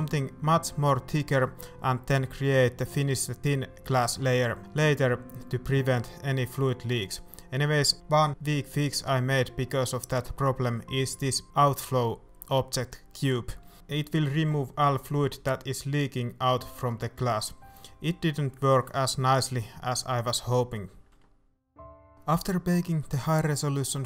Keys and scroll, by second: 0.2 typing, 5.6 shift+a, 7.3 shift+a, 9.5 a, 9.8 ctrl+shift+s, 10.5 shift+a, 12.3 z, 14.7 a.